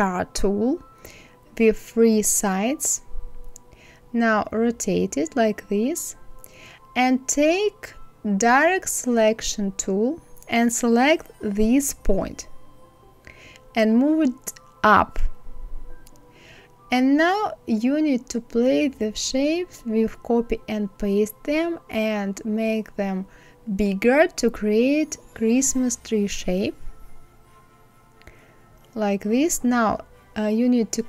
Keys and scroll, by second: 22.0 ctrl+z.